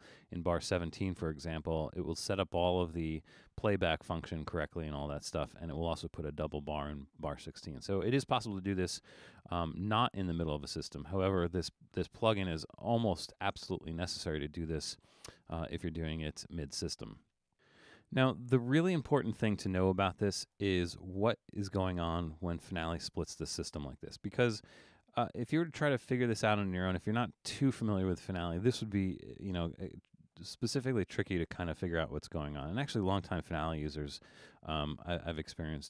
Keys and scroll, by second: 24.9 super+=.